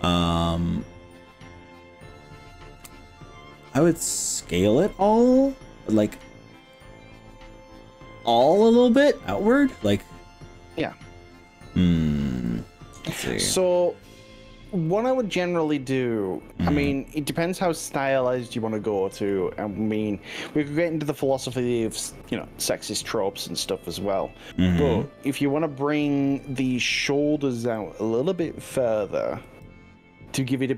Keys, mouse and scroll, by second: 3.6-6.1 drag, 6.7 click, 9.9-11.3 middle drag, 14.9-16.5 middle drag, 16.8 middle click, 17.6 middle click, 21.3 middle click, 22.4-24.3 middle drag, 24.5-27.3 middle drag, 27.9-28.3 drag, 29.4 g.